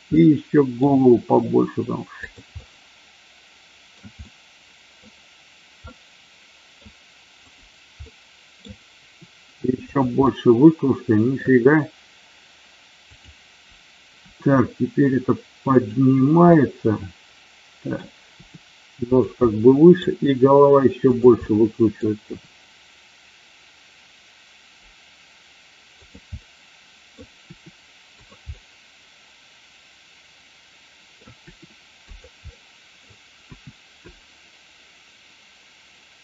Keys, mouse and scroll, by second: 0.0-0.7 middle drag, 1.0 r, 2.1 click, 2.5-3.9 middle drag, 4.1-5.0 middle drag, 5.9-6.7 middle drag, 7.4 click, 8.0-8.5 middle drag, 9.0 r, 9.8 click, 10.2-11.4 middle drag, 13.0 click, 14.2 r, 15.8 click, 16.5-18.0 middle drag, 18.3 r, 19.4 middle click, 21.4 middle click, 26.0 click, 26.4 middle click, 28.5 middle click, 29.3-31.1 middle drag, 31.3 r, 32.0 click, 32.4-33.0 middle drag.